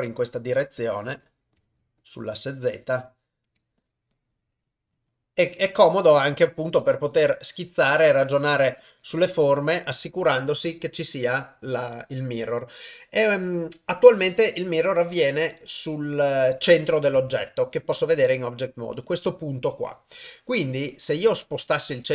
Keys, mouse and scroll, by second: 0.0 click, 0.3 click, 0.8 click, 1.0 click, 1.2 click, 1.6 click, 1.8 click, 2.3 click, 2.5 click, 2.7 click, 3.6 click, 3.9 click, 4.2 click, 4.4 click, 4.9 click, 5.4 click, 5.8 click, 6.1 click, 6.5 click, 6.8 click, 6.9 click, 7.1 click, 7.4 click, 8.2 click, 8.8 click, 9.0 click, 17.3 ctrl+Tab.